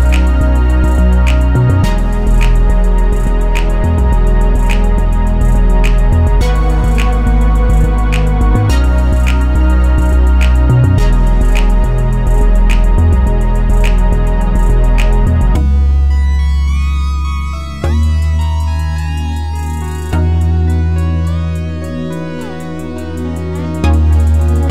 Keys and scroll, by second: 1.4 F8.